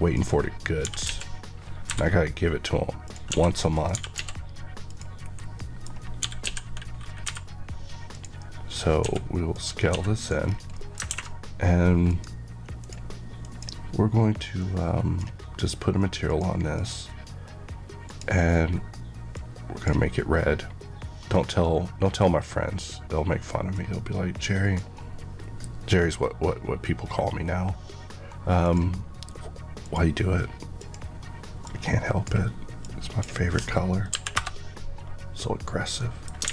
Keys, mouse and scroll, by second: 0.1 click, 0.8-1.8 typing, 3.0 click, 3.3-4.1 typing, 3.7 click, 4.8 click, 5.2-7.2 typing, 5.5 middle click, 5.8 scroll down 1, 8.0 click, 8.3 middle click, 8.9 s, 9.4 click, 9.8 s, 10.2 click, 10.4 scroll, 10.5 scroll down 1, 10.7 middle click, 12.0 click, 12.8 click, 13.3 click, 18.0 click, 29.7 click, 30.7 click, 34.0 KP_Enter, 35.9 middle click, 36.4 alt+a.